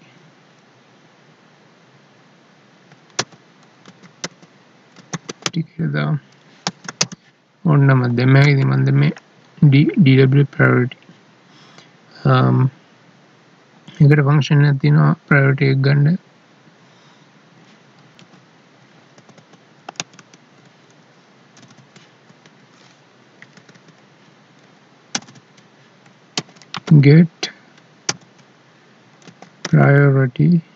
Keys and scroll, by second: 6.7 space, 7.0 space, 8.4 ctrl+s, 18.2 Tab, 18.3 alt+e, 19.2 Up, 20.0 ctrl+Right, 22.3 Down, 23.2 Escape, 23.6 Down.